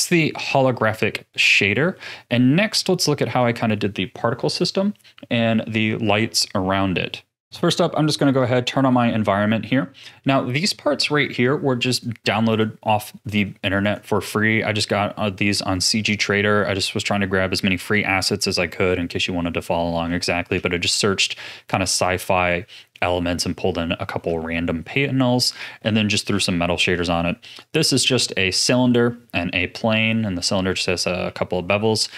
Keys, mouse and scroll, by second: 0.7-1.4 scroll up 5, 1.5-5.5 shift+middle drag, 8.4 click, 9.0-9.6 scroll down 2, 9.6-11.0 scroll down 4, 11.9 click, 12.5 click, 13.1-13.8 middle drag, 13.8 click, 14.3-16.8 middle drag, 16.8-17.7 scroll up 2, 17.7-18.5 shift+middle drag, 18.5 scroll down 3, 18.7 scroll up 1, 18.9-24.5 middle drag, 24.5-25.5 scroll down 2, 25.5-26.3 middle drag, 26.3 a, 26.7-27.5 middle drag, 27.5 click, 27.9-31.2 middle drag, 31.2 z.